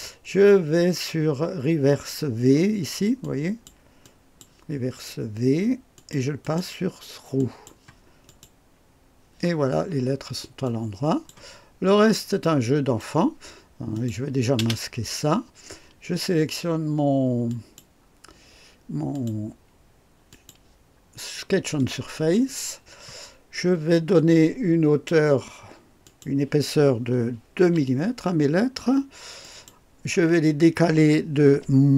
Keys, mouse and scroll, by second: 3.2 click, 4.0-4.6 drag, 5.9 click, 6.4 click, 7.4 click, 8.3 click, 9.8 scroll up 1, 10.6-11.5 drag, 11.8 scroll down 2, 12.4-13.2 right drag, 13.9 click, 14.6 space, 17.5 click, 19.1 click, 20.3 click, 26.0 click, 27.6 KP_2, 29.4 click.